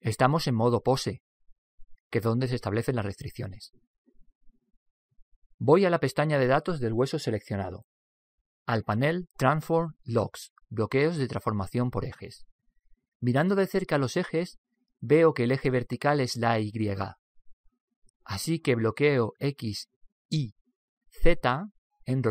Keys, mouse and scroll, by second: 7.6 click, 14.3-16.7 middle drag, 20.9 click.